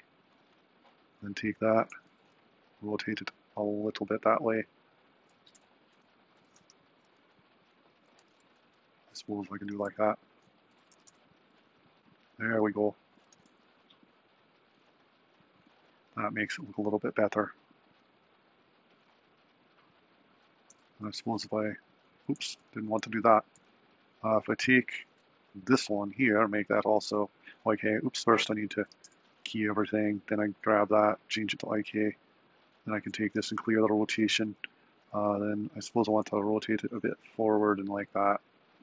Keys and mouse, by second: 1.0 click, 2.1 r, 4.8 drag, 5.5 g, 6.7 r, 8.3 g, 9.8 r, 11.1 g, 13.0 drag, 13.5 r, 20.3 click, 21.2 alt+r, 23.5 super+z, 25.6 click, 28.4 a, 28.9 i, 30.2 click, 31.3-32.6 drag, 32.8 click, 33.5 alt+r, 35.4 r.